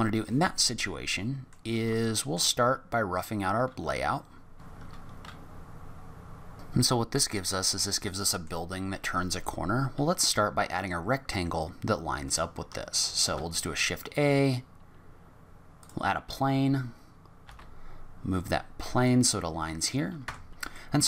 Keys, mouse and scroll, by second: 0.4-0.8 scroll down 5, 1.1 middle click, 2.0 shift+middle click, 4.6-5.8 typing, 5.1 click, 5.2 middle click, 5.5 Tab, 5.7 click, 5.9 Tab, 5.9 middle click, 5.9 scroll up 4, 5.9 middle click, 7.1 scroll down 2, 7.3-7.9 scroll up 3, 8.0 middle click, 13.2 shift+a, 16.2-16.8 scroll down 6, 17.4 g, 19.3-19.9 scroll up 8, 20.2 Tab, 20.5 scroll up 1, 20.5 z, 20.7 middle click.